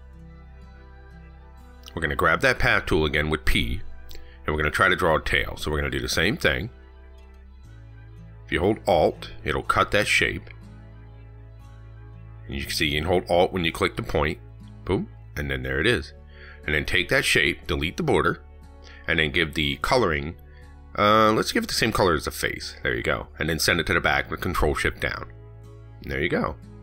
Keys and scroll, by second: 25.1 ctrl+shift+Down.